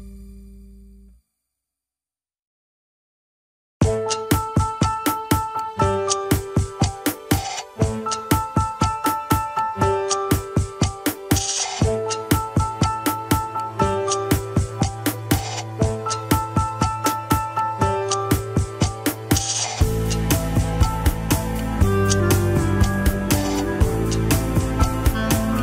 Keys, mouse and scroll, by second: 0.3-0.8 scroll up 3, 0.8 shift+middle click, 1.0 scroll up 1, 2.1 click, 2.9 g, 13.9-16.5 middle drag, 16.7 middle click, 17.1-17.5 scroll up 1, 17.5 click, 18.9 click, 21.4-22.4 middle drag, 22.4 scroll down 1, 22.6 KP_1, 23.4 ctrl+s.